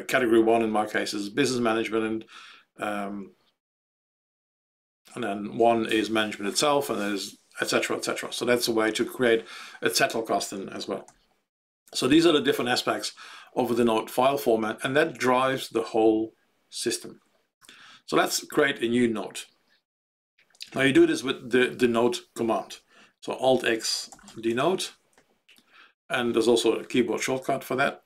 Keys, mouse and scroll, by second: 11.0 ctrl+g, 23.2 alt+x, 23.6-25.0 typing.